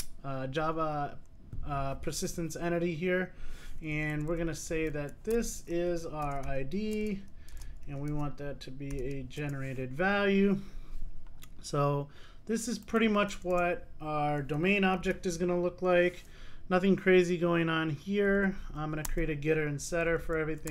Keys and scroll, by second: 7.1 Return, 15.2 super+n.